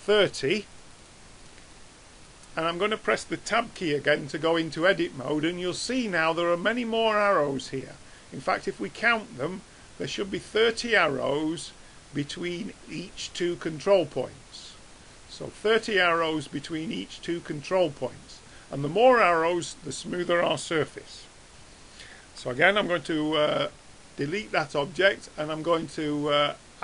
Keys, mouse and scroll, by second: 4.7 Tab, 5.6-7.9 middle drag, 11.7-19.0 middle drag, 22.4 Tab, 23.7 x, 25.6-26.8 drag.